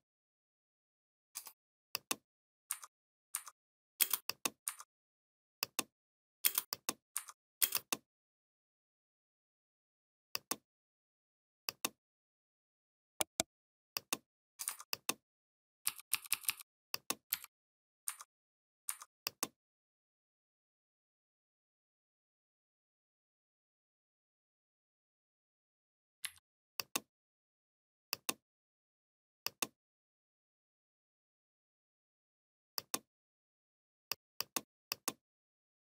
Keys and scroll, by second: 3.8 space, 6.3 space, 7.4 space, 15.7 i, 17.1 v, 26.1 Delete.